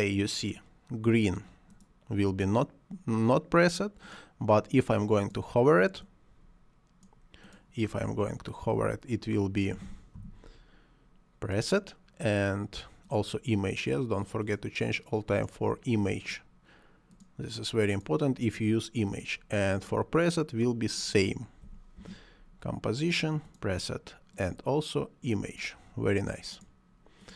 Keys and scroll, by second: 9.8 c, 10.2 o, 21.7 c, 22.0 o.